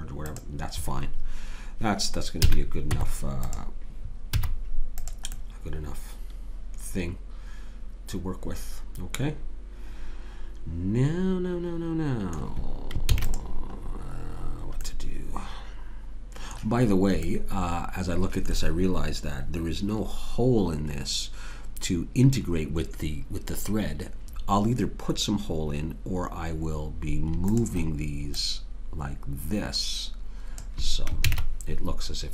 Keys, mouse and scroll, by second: 2.5 a, 2.9 Tab, 4.3 z, 13.1 ctrl+s, 17.3-20.8 middle drag, 27.6-30.0 drag, 28.8-30.6 right drag, 31.2 ctrl+z.